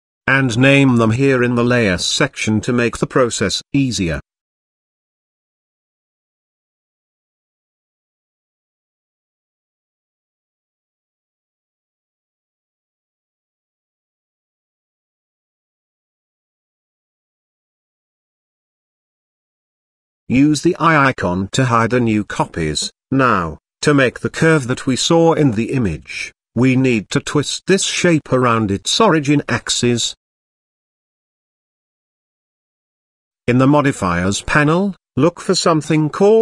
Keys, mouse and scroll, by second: 2.7 click, 3.2 shift+d, 6.9 right click, 8.8 shift+d, 11.9 right click, 13.4 click, 13.6-16.8 drag, 16.0 s, 17.0 click, 17.2-20.1 drag, 21.1 click, 21.7 click, 22.8 click, 23.2 click, 23.7-25.7 middle drag, 26.1-26.4 scroll up 2, 27.8-29.4 middle drag, 33.7 click, 35.1-36.4 drag.